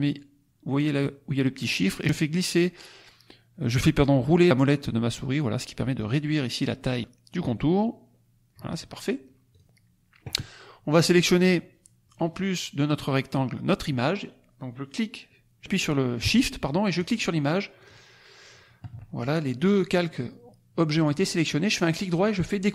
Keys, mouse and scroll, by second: 2.2 scroll down 2, 2.8-3.3 scroll down 2, 3.3 scroll down 2, 4.4-4.8 scroll down 2, 5.0-5.4 scroll down 2, 6.0 scroll down 2, 6.7 scroll down 2, 7.8 scroll down 2, 9.4 click, 16.9 shift+click, 17.7-18.4 shift+drag, 21.8 right click.